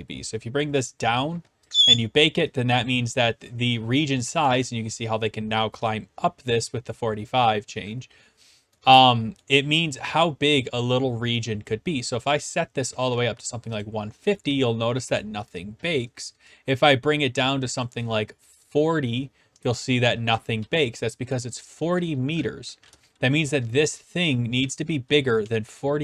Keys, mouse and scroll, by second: 0.6 click, 1.6 click, 1.8-2.8 drag, 2.8-4.5 d, 4.6-5.7 right drag, 8.8 s, 9.3 s, 9.4-10.4 right drag, 9.4 s, 12.9 click, 13.8 click, 14.1-14.9 typing, 15.2 right click, 15.8 scroll, 17.8 click, 18.6 click, 20.3 typing, 21.9 right click, 22.6-24.8 typing, 22.9 right click, 25.3-26.0 right drag.